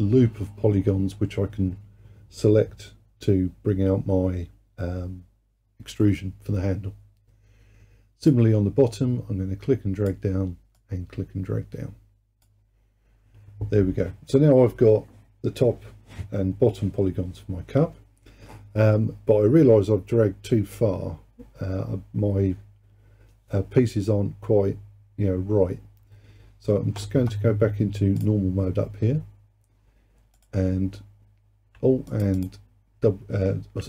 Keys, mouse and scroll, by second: 8.3-14.0 drag, 28.2-30.5 drag, 32.1 alt+click, 32.4 alt+click.